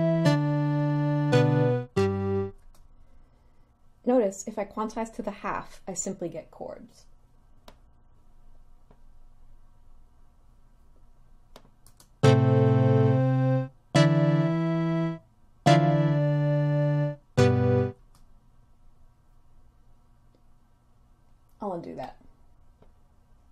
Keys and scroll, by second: 2.8 space, 12.0 space, 18.2 space.